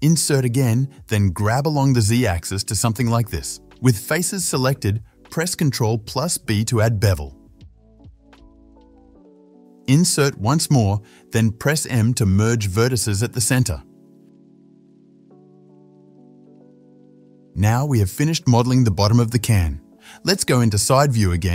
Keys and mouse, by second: 1.1 i, 2.5-7.9 drag, 5.5 ctrl+b, 7.9 middle click, 8.3-16.8 shift+drag, 10.7 i, 11.6 i, 13.2 m, 16.5 middle click, 16.5 right click, 16.8-18.5 right drag, 18.5-21.5 drag, 20.6 KP_3, 21.4 KP_3.